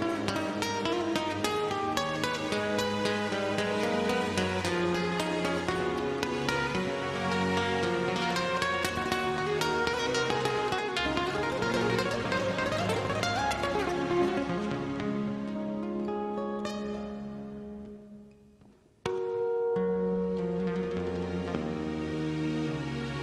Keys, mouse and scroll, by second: 0.0 scroll down 1, 1.9 Return, 4.0 KP_5, 5.9 scroll down 1, 6.7 middle click, 7.2 scroll up 1, 7.7 middle click, 9.1 e, 9.5 a, 9.9 Return, 11.6 click, 19.1 scroll down 1, 19.5 scroll up 1, 20.7 d, 21.3 a, 21.5 Return, 23.0 click.